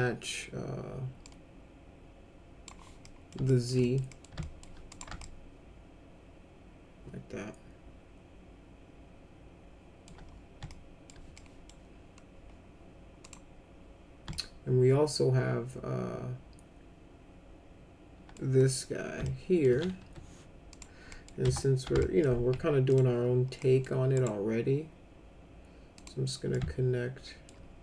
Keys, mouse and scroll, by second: 1.2-2.6 drag, 3.0 middle click, 3.4 alt+middle click, 3.8 middle click, 4.1 middle click, 4.3 alt+middle click, 4.9 click, 5.2-10.0 alt+middle drag, 10.6 alt+middle click, 11.3 middle click, 13.2 click, 14.3-18.3 alt+middle drag, 19.2 alt+middle click, 20.0 1, 20.7 click, 21.0 middle click, 21.4 F3, 22.0 alt+middle click, 22.9 ctrl+click, 23.6 middle click, 24.1 right click, 25.9 click, 26.5 alt+middle click.